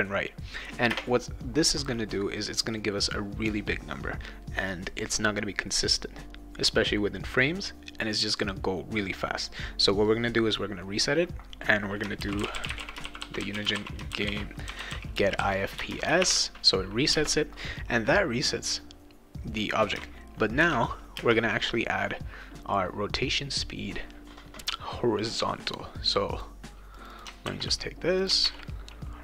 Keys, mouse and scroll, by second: 0.9 space, 11.9-17.1 typing, 20.6 shift+8, 21.2 space, 26.3 click, 27.0 click, 27.4 ctrl+c, 28.2 click, 28.4 ctrl+v.